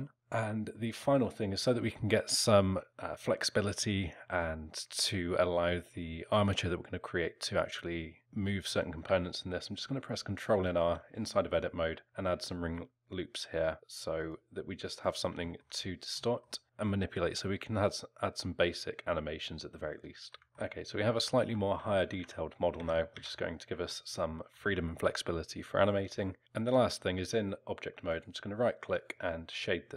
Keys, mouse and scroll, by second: 0.2 Tab, 0.2 alt+middle click, 0.2-0.7 scroll up 1, 0.7 middle click, 10.8 ctrl+r, 15.4 alt+middle click, 16.6 scroll up 2, 19.5 scroll down 1, 20.0 alt+middle click, 20.4 Tab, 20.4 alt+middle click, 20.4 z, 21.1 alt+middle click, 21.9 alt+middle click, 22.2 Tab, 22.8 a, 23.1 a, 23.9 alt+middle click, 28.1 right click.